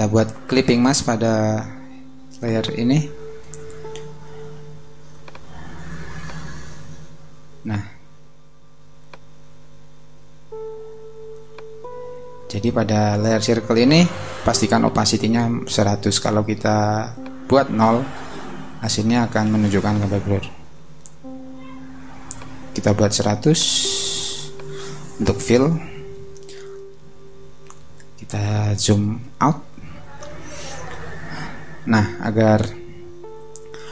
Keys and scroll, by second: 27.6 super+0.